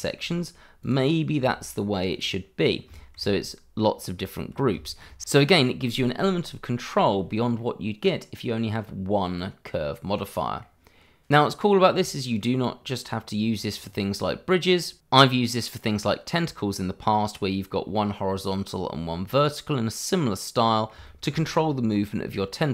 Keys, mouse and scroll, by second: 0.8 click, 2.6 scroll down 1, 2.9 shift+middle click, 4.5 scroll down 1, 4.8 shift+middle click, 5.2 middle click, 6.1 click, 6.3 scroll up 1, 6.8 shift+middle click, 7.4-7.7 scroll up 1, 7.7 middle click, 9.7 scroll down 1, 10.1 middle click, 21.2 shift+middle click, 21.6 middle click.